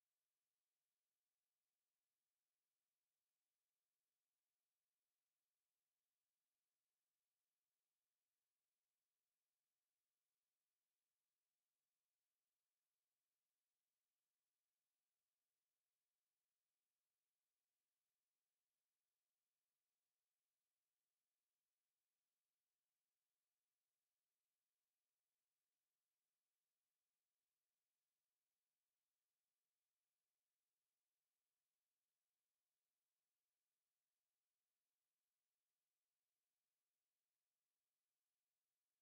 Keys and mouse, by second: 3.1 alt+click, 3.6 alt+click, 10.4 alt+click, 11.5 alt+middle click, 13.8 click, 19.2 alt+click, 19.9 alt+click, 21.4 alt+click, 22.5 alt+click, 25.2 alt+click, 26.1 alt+right click, 26.8 alt+click, 27.2 alt+right click, 27.6 alt+middle click, 28.1 alt+click, 30.8 click, 31.3 shift+right click, 32.2 alt+click, 32.9 click, 35.9 alt+right click, 36.3 alt+click, 36.6 right click, 37.3 alt+click, 37.7 click, 38.3 w, 38.9 click.